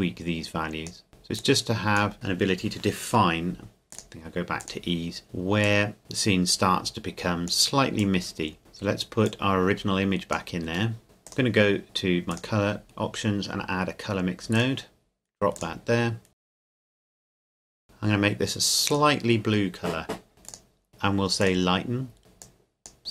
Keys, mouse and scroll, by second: 3.9 click, 9.3 click, 10.9 middle click, 11.0 click, 14.5 click, 20.5 click, 21.4 click.